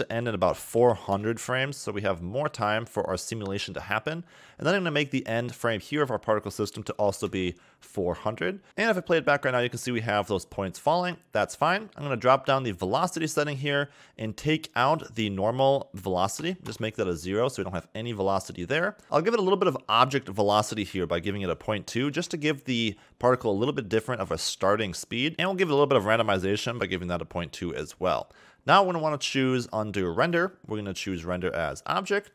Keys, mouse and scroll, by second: 0.8 0, 1.9-2.2 scroll down 5, 2.5 middle click, 3.0 scroll down 4, 5.7 click, 7.1 0, 8.6 click, 11.0 scroll down 1, 12.7 click, 13.1-13.5 scroll down 5, 14.8 click, 19.0 click, 20.8 click, 24.7 scroll down 2, 25.3 click, 25.4 click, 27.9-28.6 scroll down 4, 30.1 click, 30.8 click.